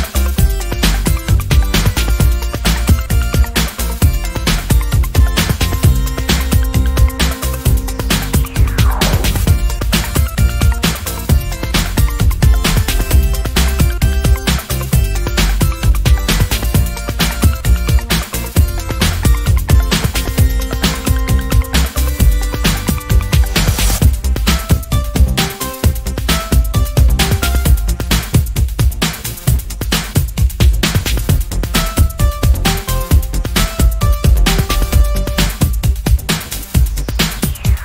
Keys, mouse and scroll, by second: 1.6 ctrl+Up, 4.9 ctrl+Left, 5.9 ctrl+Down, 7.5 click, 8.4-10.8 drag, 11.8-15.6 drag, 16.2 click, 17.1 scroll down 2, 17.8 click, 18.7-20.0 ctrl+shift+drag, 21.4 ctrl+shift+g, 21.9 ctrl+click, 23.8 ctrl+click, 25.5-27.1 drag, 27.5 ctrl+shift+click, 29.2 click, 30.1 KP_6, 30.4 KP_Enter, 32.5 shift+click, 34.1 shift+click, 36.1 click, 36.9 click.